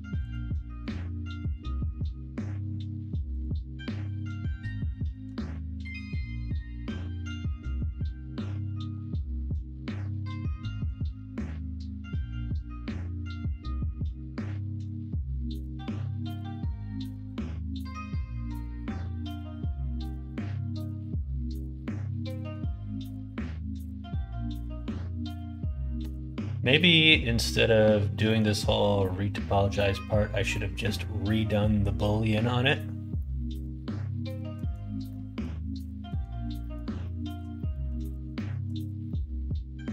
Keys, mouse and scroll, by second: 0.2 ctrl+click, 0.8 ctrl+click, 2.3 ctrl+z, 3.3 ctrl+click, 4.1 ctrl+click, 5.3-6.4 middle drag, 5.7 ctrl+e, 7.1 middle click, 11.1-14.8 middle drag, 28.1 middle click, 33.1-34.5 middle drag, 35.0 middle click, 36.5 middle click, 37.0 shift+middle click, 37.5 middle click, 37.9 middle click, 38.3 shift+middle click, 39.0-39.9 middle drag.